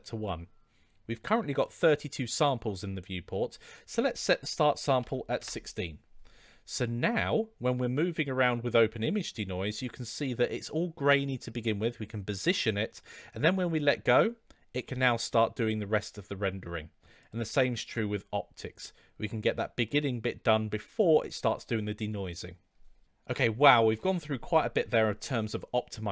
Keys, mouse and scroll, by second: 3.7-6.2 drag, 7.2-8.1 middle drag, 9.7-13.4 middle drag, 17.1-18.2 drag, 19.8-20.3 middle drag.